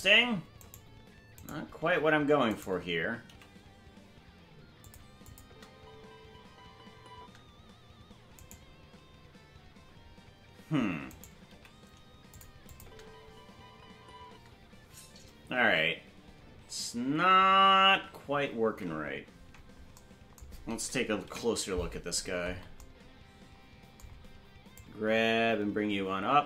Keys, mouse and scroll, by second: 2.5 right click, 3.2 g, 5.2 click, 5.4 space, 7.5 space, 8.4-10.3 right drag, 11.4 right click, 11.4 g, 12.6 click, 12.8 space, 16.0 space, 21.2 KP_Decimal, 22.1-22.8 scroll down 13, 24.7-26.4 drag.